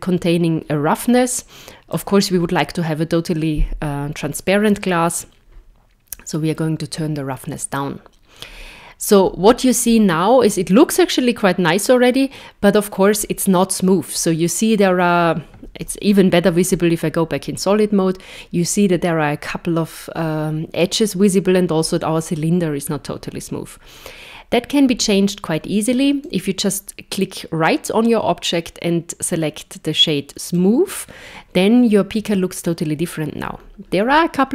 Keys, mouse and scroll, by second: 1.4 click, 8.4 scroll up 3, 9.2 scroll up 3, 15.8 z, 22.9-23.5 scroll down 2, 26.3 right click, 33.4-34.2 scroll up 3.